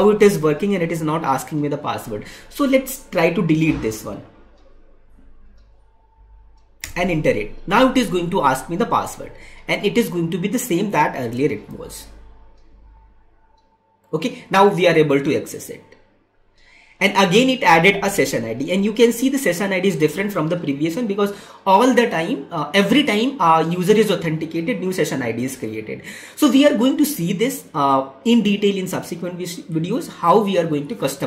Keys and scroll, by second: 11.5 ctrl+v.